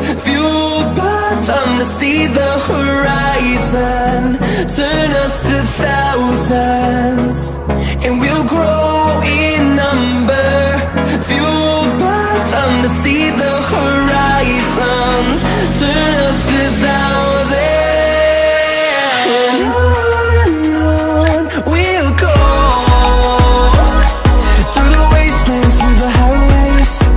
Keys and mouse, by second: 0.9 click, 1.1 middle click, 1.4 click, 1.6 middle click, 1.8 click, 2.1 click, 3.1 click, 3.5 click, 4.2 click, 5.4 click, 7.3 click, 7.5 click, 8.4 click, 8.5 middle click, 9.9 click, 10.3 click, 10.7 click, 11.3 click, 12.1 click, 12.5 middle click, 15.1-18.2 drag, 18.8 KP_0, 20.0 click, 20.8 shift+a, 24.0 middle click, 25.3 middle click.